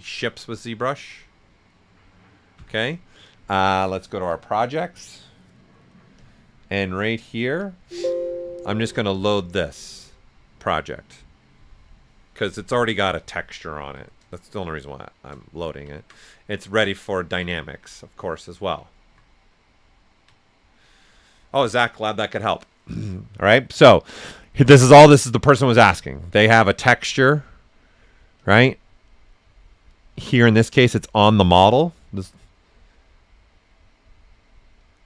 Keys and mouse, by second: 1.4 typing, 4.3-7.6 drag, 10.0 click, 12.4 click, 13.7-14.4 typing, 14.0-15.5 drag, 15.5 ctrl+right click, 16.1-26.1 right drag, 18.4-19.2 typing, 26.1 click, 28.4 click, 28.4 typing, 30.3-31.0 typing.